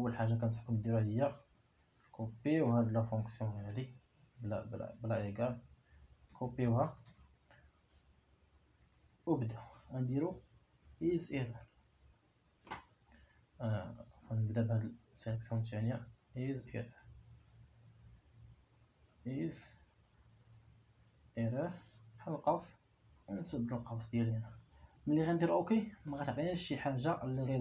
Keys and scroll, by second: 3.1 ctrl+c, 6.8 ctrl+c, 11.8 i, 13.3 Escape, 19.2 i, 24.5 [.